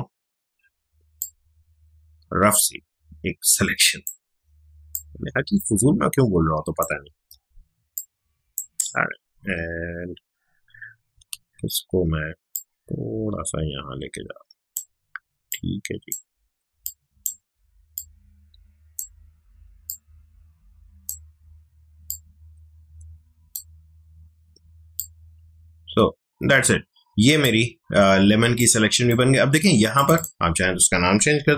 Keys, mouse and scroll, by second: 1.2-4.9 drag, 4.9-7.1 drag, 7.1 ctrl+z, 7.9-9.3 drag, 9.3 ctrl+z, 11.8 ctrl+z, 12.5-28.4 alt+drag, 28.4 space, 28.6-29.9 ctrl+drag, 31.2-31.5 typing.